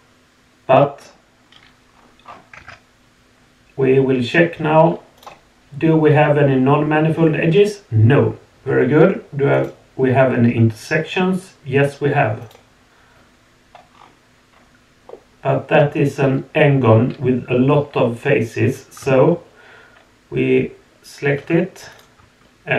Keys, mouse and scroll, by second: 0.4-1.0 drag, 1.9 scroll up 2, 1.9 middle click, 2.2 scroll down 2, 2.6 Tab, 5.2 click, 9.5 click, 12.4 click, 13.9 scroll up 3, 14.5 scroll down 2, 15.1 middle click, 16.1 scroll up 2, 21.9 click.